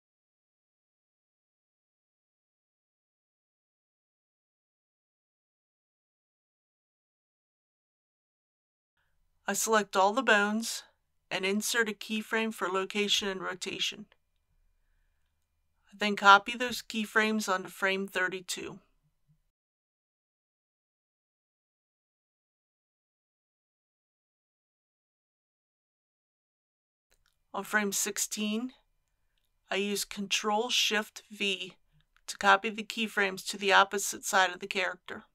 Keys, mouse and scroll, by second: 1.4 click, 2.5 scroll down 1, 3.9-6.3 middle drag, 6.5 shift+middle click, 9.5 a, 11.2 i, 11.8 click, 17.8 ctrl+c, 18.6-21.4 drag, 21.5 ctrl+v, 25.3-28.8 drag, 32.0 ctrl+shift+v.